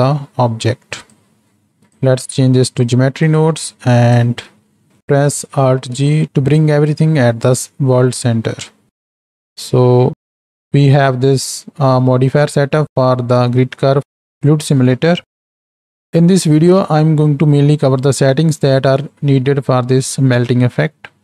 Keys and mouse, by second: 1.8-2.8 drag, 3.3 click, 3.8 click, 4.9 ctrl+alt+g, 5.8 ctrl+g, 9.1 Home, 10.0 alt+a.